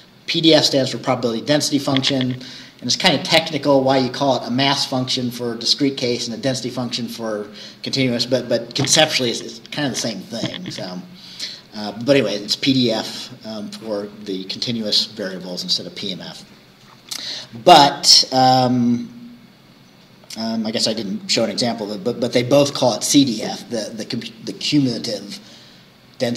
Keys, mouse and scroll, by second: 17.4-18.6 scroll down 4, 19.3 scroll down 2, 20.0-26.2 scroll up 4, 26.2-26.3 scroll up 1.